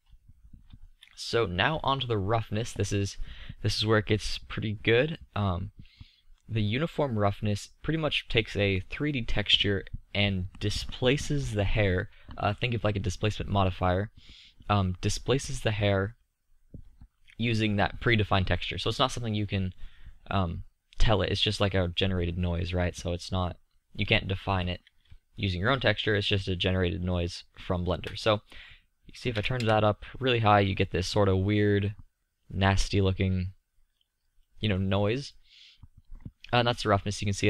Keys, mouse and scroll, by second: 4.2-6.2 middle drag, 8.9-11.5 middle drag, 28.2-30.1 middle drag, 30.7-31.5 middle drag, 32.8-37.4 middle drag.